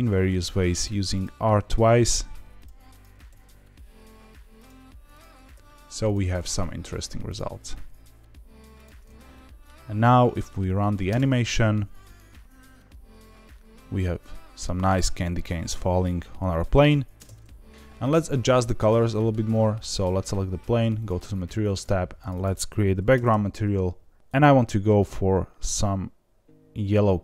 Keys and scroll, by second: 0.0 r, 1.4 r, 5.3 r, 5.5 r, 7.5 r, 7.7 r, 11.0 space, 17.1 space.